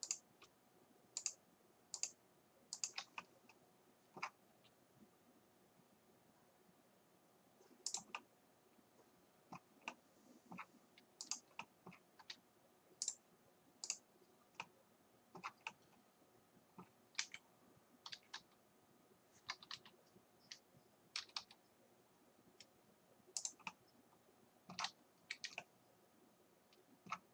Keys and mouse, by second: 3.4 middle click, 4.0 click, 4.2 middle click, 4.5-7.9 drag, 4.5 g, 10.1 middle click, 11.6 right click, 11.9 right click, 12.2 r, 12.4-14.4 middle drag, 14.4 right click, 14.8 right click.